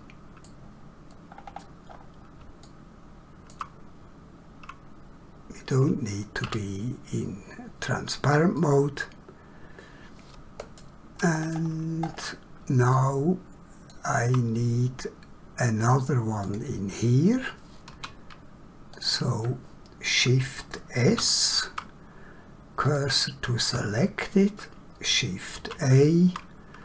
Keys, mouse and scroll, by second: 1.3 scroll down 1, 1.9 scroll up 1, 2.7 shift+middle click, 6.4 <, 8.6 middle click, 11.4 scroll down 1, 12.1 scroll up 1, 13.0 shift+middle click, 16.4 click, 17.9 1, 18.9 click, 21.1 shift+s, 22.8 click, 24.0 scroll up 1, 25.6 shift+a.